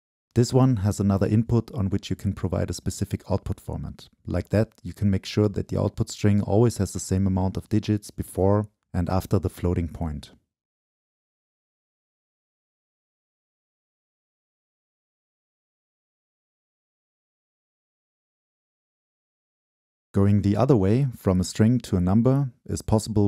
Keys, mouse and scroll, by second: 2.3 click, 3.6-7.0 drag, 3.6-5.2 scroll up 2, 5.2 scroll up 1, 6.3-7.0 scroll up 2, 7.0-7.5 middle drag, 7.5-9.7 drag, 10.8 Return, 11.8-14.3 drag, 16.6 click, 16.7-18.5 middle drag, 18.5 click.